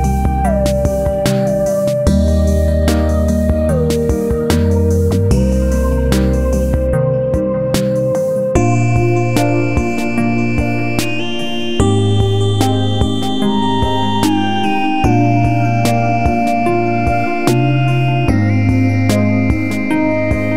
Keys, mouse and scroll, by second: 1.2-3.4 drag, 3.4 click, 4.2 click, 9.2 click, 14.0 ctrl+z, 14.7 click, 17.4 right click, 18.1 click, 19.3 scroll up 1.